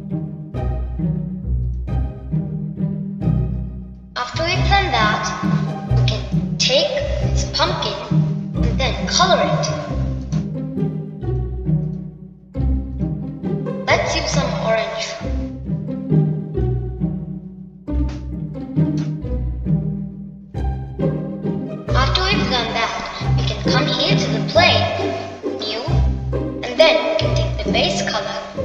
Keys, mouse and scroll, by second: 3.5 click, 4.0-7.2 middle drag, 7.2-7.8 scroll down 2, 7.8-9.3 middle drag, 9.3 click, 11.1-12.1 scroll down 2, 12.1 click, 13.1 click, 13.7-14.9 drag, 21.2-24.2 middle drag, 25.4 click, 27.3-28.6 drag.